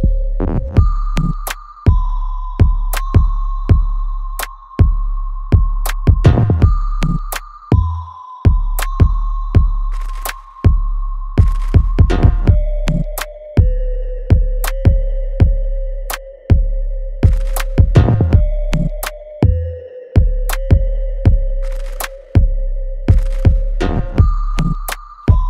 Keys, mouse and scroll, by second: 7.1-10.1 ctrl+drag, 10.5 alt+right click, 10.9 alt+click, 11.6 alt+right click, 12.1-13.6 alt+middle drag, 13.6 right click, 13.6 alt+right click, 14.2-16.0 alt+middle drag, 16.0-17.6 drag, 17.6 ctrl+z, 18.5-23.1 ctrl+drag, 23.1 alt+right click, 23.5-25.1 alt+middle drag, 25.1 click.